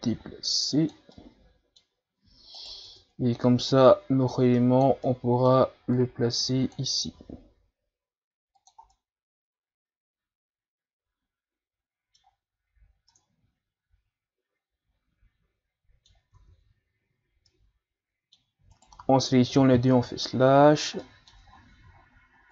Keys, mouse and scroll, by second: 1.1-2.2 middle drag, 2.2 Tab, 2.6 right click, 2.9 Tab, 3.9-5.1 drag, 5.1 middle click, 6.0-7.2 drag, 7.2 s, 8.9-12.0 middle drag, 13.1-16.1 middle drag, 16.3 Tab, 17.5-18.7 middle drag, 18.7 shift+right click, 19.5 KP_Divide, 20.3-20.7 shift+scroll down 3, 20.7 scroll up 3, 21.0-21.5 middle drag, 21.6-21.9 ctrl+scroll up 1, 21.9-22.3 shift+scroll down 5, 22.3 scroll up 1.